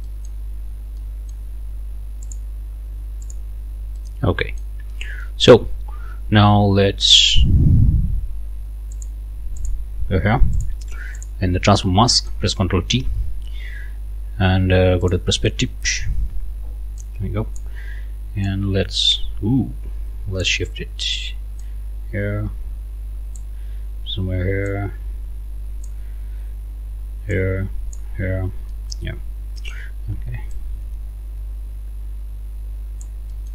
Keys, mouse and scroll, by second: 0.1 click, 0.4 scroll up 2, 1.0 middle click, 2.3 middle click, 3.2 middle click, 4.0 middle click, 4.9 scroll up 2, 5.2 middle click, 5.8 scroll down 2, 8.9 click, 9.6 click, 10.6 click, 11.2 click, 12.1 ctrl+click, 12.9 ctrl+t, 15.0 click, 17.1 click, 18.5-20.6 drag, 21.6-23.6 drag, 24.7-26.1 drag, 27.3 click, 28.1-28.7 scroll up 3, 28.7 middle click, 29.2 scroll down 2, 29.6 click, 30.6-33.2 drag, 33.3 click.